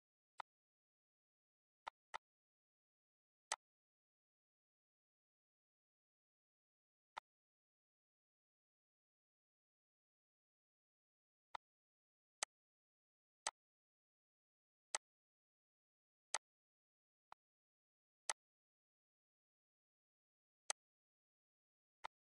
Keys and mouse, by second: 0.8 click, 1.8 click, 2.8 click, 3.5 click, 4.1 click, 4.5 click, 5.3 click, 7.0 click, 8.0 click, 9.4 click, 12.6 click, 13.1 click, 14.2 click, 14.9 click, 15.2 click, 17.6 click, 18.7 click, 19.7 click, 20.7 click, 21.6 click.